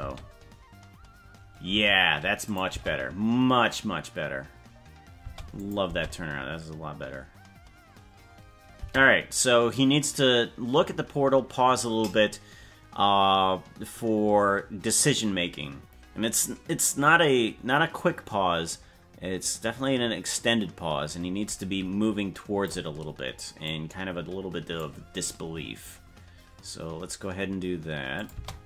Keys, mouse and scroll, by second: 0.0 space, 1.7 space, 2.5 click, 2.8 space, 5.3 space, 5.6 click, 5.8 space, 8.8 space, 21.5-22.7 drag, 23.7-24.8 drag, 28.2 click, 28.3 space.